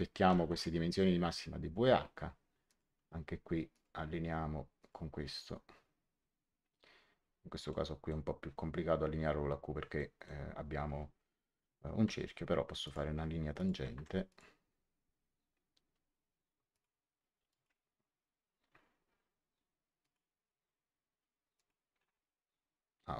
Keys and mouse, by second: 0.2 w, 0.4 Return, 0.4 KP_Enter, 2.6 click, 3.6 click, 4.7 click, 7.6 middle click, 9.9 middle click, 12.0 click, 13.8 Escape, 14.2 click, 16.6 click, 19.9 click, 21.5 click.